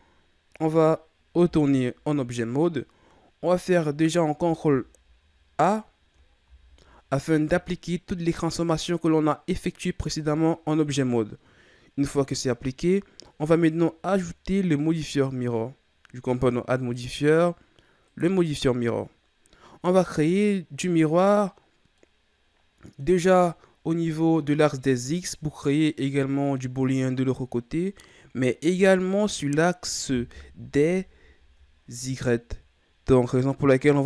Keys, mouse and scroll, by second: 1.5 Tab, 2.7-4.4 scroll up 4, 4.4 ctrl+a, 6.4 ctrl+a, 15.0-18.2 drag, 21.7 scroll down 3, 22.0-23.3 middle drag, 23.3-24.9 ctrl+scroll down 10, 24.9-30.3 middle drag, 30.3 KP_3, 31.3-32.4 shift+scroll up 3.